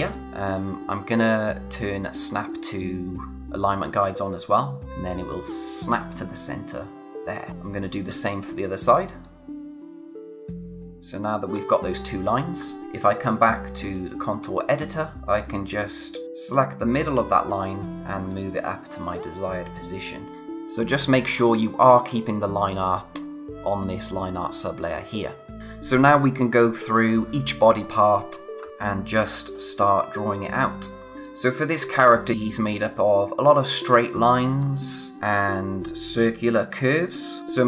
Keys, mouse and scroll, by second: 0.1 click, 0.2 z, 0.9 click, 7.7 space, 9.2 click, 10.9-11.5 scroll down 1, 13.9 click, 14.8-15.2 scroll up 1, 15.2 click, 25.6-26.6 scroll up 1, 26.6 click, 28.6 space, 28.7 click, 28.9 space, 30.8 click, 31.1 space, 34.6 click, 34.8 space.